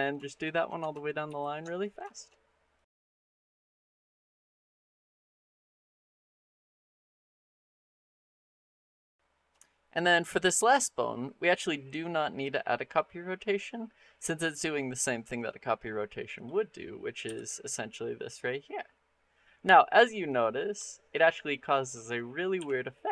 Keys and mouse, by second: 1.1 ctrl+shift+c, 2.0 shift+click, 2.6 click, 3.0 shift+click, 3.6 middle click, 4.1 ctrl+shift+c, 4.4 shift+middle click, 4.8 shift+middle click, 5.0 ctrl+shift+c, 5.3 shift+middle click, 5.5 click, 5.7 click, 5.9 shift+click, 6.1 ctrl+shift+c, 6.4 shift+middle click, 6.6 click, 7.1 ctrl+shift+c, 7.4 shift+click, 8.0 ctrl+shift+c, 8.3 shift+click, 8.5 click, 8.6 shift+click, 14.0 click, 16.5 middle click, 17.1 r, 20.7 shift+middle drag, 21.4 middle click, 21.8-22.3 middle drag, 22.4 r.